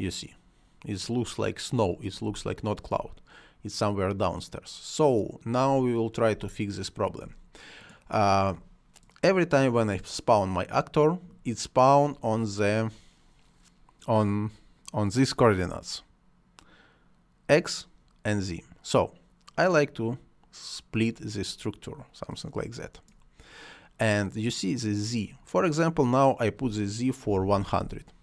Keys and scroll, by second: 2.2 space, 6.3 space, 27.0-27.8 typing.